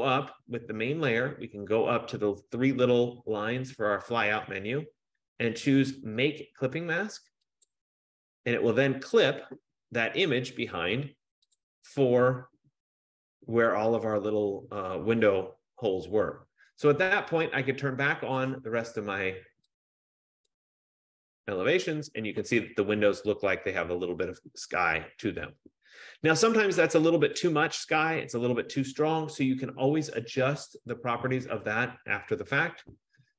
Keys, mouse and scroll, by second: 0.8 click, 3.8 click, 7.9 click, 11.7 click, 18.7 click, 20.6 click, 27.8 click, 31.2 click.